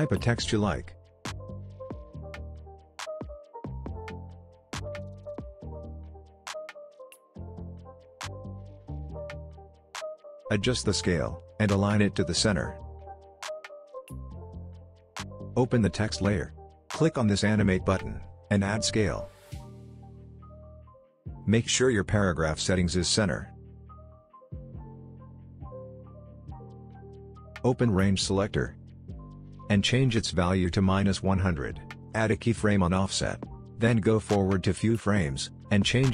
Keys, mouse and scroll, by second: 0.0-2.5 typing, 2.4-3.3 drag, 6.7-11.7 drag, 16.2 click, 20.4 click, 28.2 click, 28.8 ctrl+z, 29.9-31.5 drag.